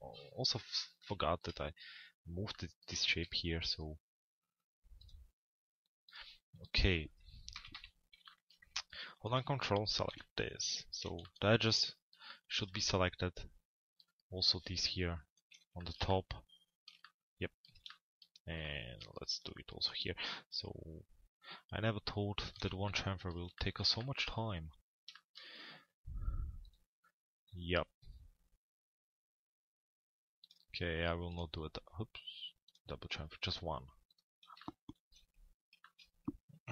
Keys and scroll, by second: 7.3 t, 7.7 z, 10.1 p, 10.7 z.